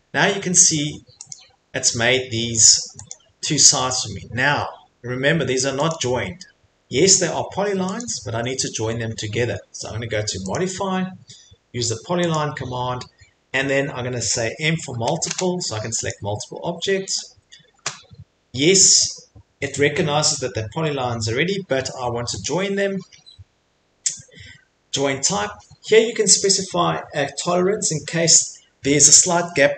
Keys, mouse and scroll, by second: 1.3 click, 1.9 Escape, 3.1 click, 3.4 Escape, 5.9 click, 6.7 Escape, 8.0 click, 8.3 Escape, 10.5 click, 12.3 click, 14.9 m, 16.1 click, 17.2 click, 22.4 click, 26.4 click.